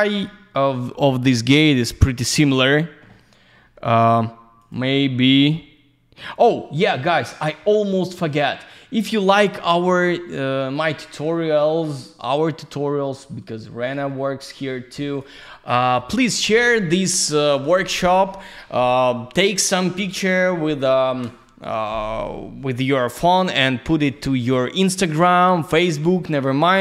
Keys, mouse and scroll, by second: 4.6 click, 6.3 click, 10.7 click, 11.8 click.